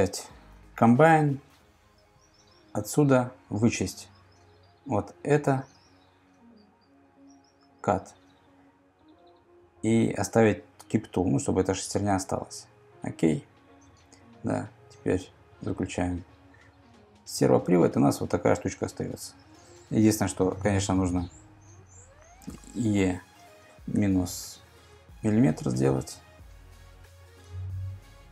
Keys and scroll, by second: 22.5 e, 27.3 Return.